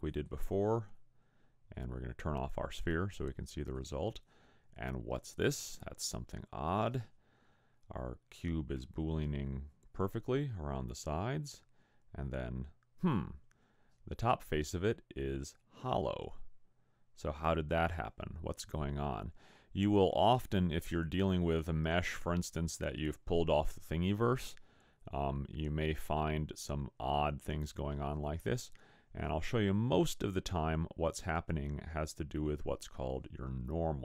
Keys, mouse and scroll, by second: 3.8 click, 6.2 scroll up 2, 9.0 middle click, 11.6 middle click, 26.5-27.3 scroll down 3, 27.3-28.6 scroll up 1.